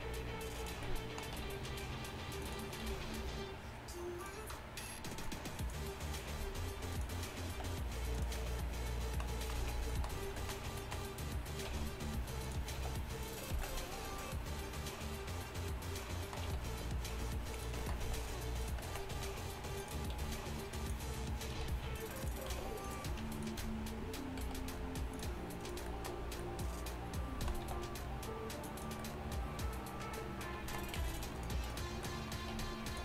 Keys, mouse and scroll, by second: 0.6 z, 0.6 s, 1.5 r, 2.9 g, 6.4 g, 7.6 e, 9.6 z, 11.8-13.6 typing, 16.6 r, 18.1 e, 19.2 r, 19.9 e, 19.9 r, 20.2 g, 21.6 r, 22.2 r, 22.2 g, 22.6 g, 24.5 g, 27.7 e, 31.0 g, 32.6 r, 32.9 g.